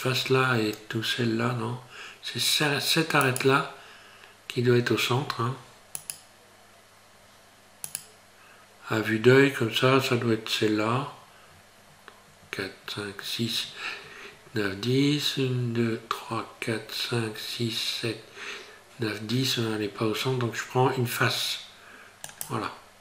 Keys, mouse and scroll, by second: 3.2 right click, 6.0 right click, 7.9 right click, 22.3 click.